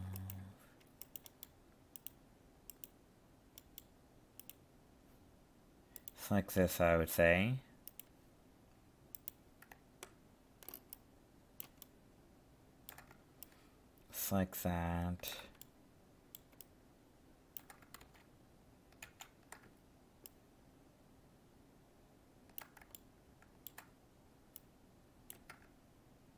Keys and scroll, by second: 18.0 ctrl+shift+z, 19.1 ctrl+z.